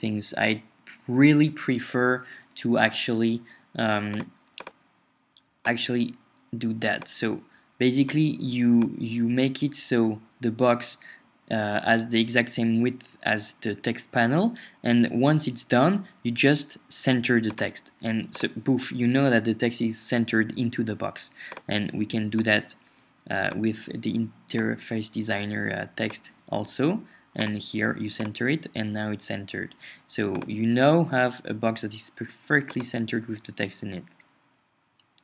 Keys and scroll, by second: 31.1 Up.